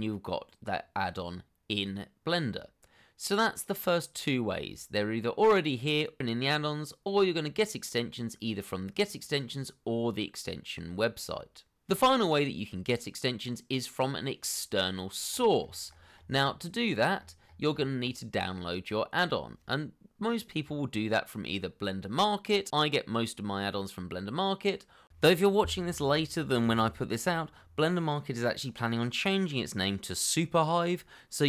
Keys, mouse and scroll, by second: 15.2 scroll up 1.